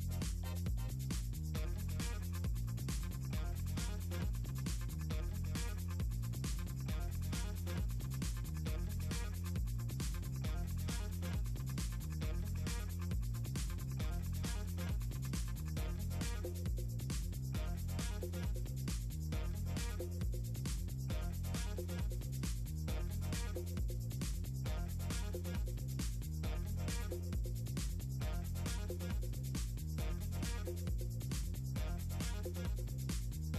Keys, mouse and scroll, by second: 1.5 click, 4.2 click, 4.9 click, 5.3 shift+click, 6.4 shift+click, 8.0 ctrl+click, 8.4 ctrl+click, 9.1-10.4 shift+drag, 10.8 Return, 11.2 click, 11.4 shift+click, 12.0 shift+click, 12.7 middle click, 13.0 click, 13.2 middle click, 13.5 click, 14.9 shift+click, 16.1 ctrl+click, 16.7 click, 17.2 ctrl+scroll down 4, 17.3 middle click, 22.4 click, 22.7 click, 23.6 click, 24.7 click, 25.6 ctrl+scroll down 2, 26.5 click, 28.3 click, 28.5 click, 29.5 drag, 29.7 click, 29.8 click, 30.3 click.